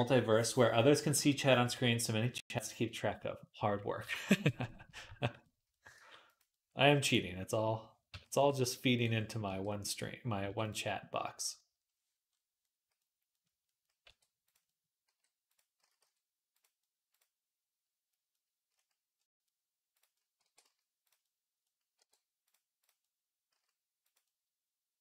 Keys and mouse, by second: 5.5 middle click, 5.8 g, 6.3-7.5 middle drag, 6.6 g, 7.9 s, 9.0 middle click, 9.3 r, 9.9-12.1 drag, 10.2 g, 12.1-13.5 middle drag, 13.6-19.2 middle drag, 13.9 r, 14.9 g, 15.6 s, 20.3 r, 21.5 click, 21.9 r, 22.4-25.0 middle drag, 23.4 s.